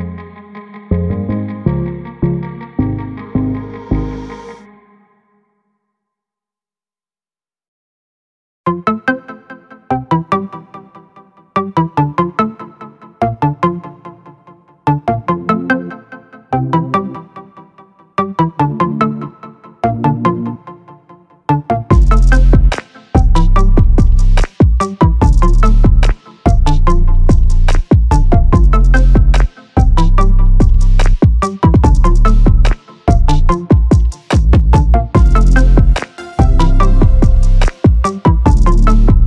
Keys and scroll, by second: 38.2 ctrl+0.